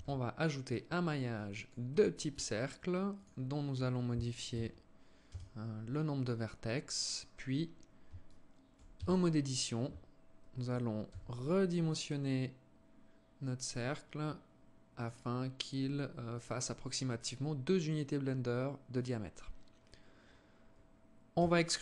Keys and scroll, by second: 8.8 Tab, 10.9 s, 21.1 e.